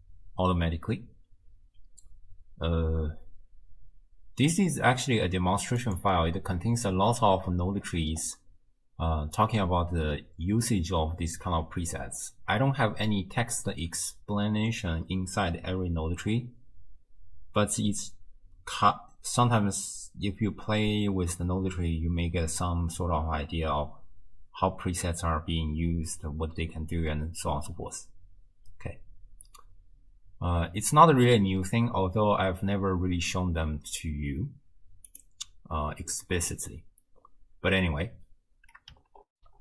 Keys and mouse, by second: 5.8 click, 39.3 ctrl+alt+shift+w.